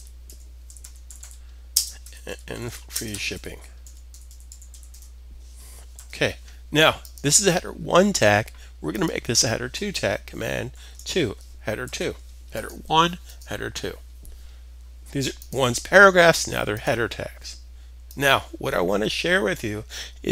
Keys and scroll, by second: 0.0-6.0 typing, 10.3 super+2, 11.4 super+s.